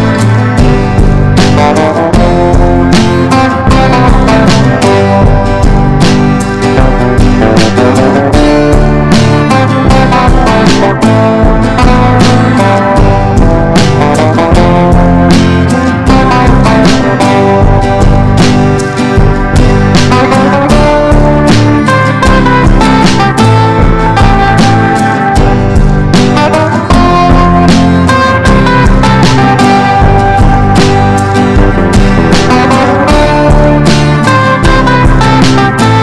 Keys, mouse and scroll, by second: 0.5 click, 1.0 ctrl+shift+g, 1.6 click, 2.1 ctrl+g, 2.9-16.9 drag, 17.4 F4, 17.8-20.0 drag, 20.0 F4, 20.3-22.5 drag, 22.5 F4, 22.8 click, 25.2 F4, 25.8-27.3 drag, 27.7 ctrl+g, 28.6 Down, 28.7 typing, 30.3-34.4 drag, 34.8-36.0 typing.